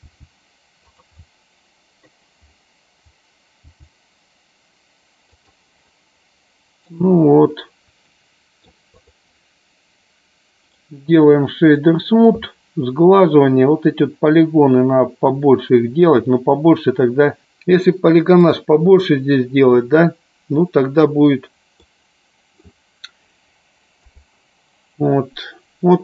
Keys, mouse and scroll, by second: 0.2 g, 1.4 middle click, 6.0-7.2 middle drag, 8.3 middle click, 9.3 click, 10.8-12.0 right drag, 15.6 middle click, 18.5 click, 22.0 middle click, 24.1 KP_0.